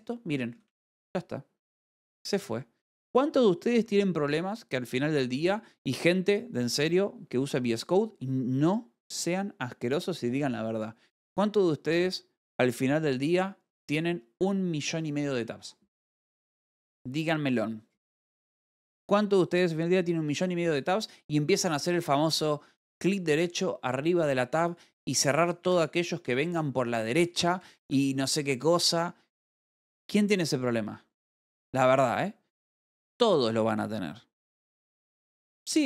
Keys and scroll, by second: 1.5 l, 3.1-3.9 typing, 26.1 Escape, 26.7 u, 27.7-28.5 typing.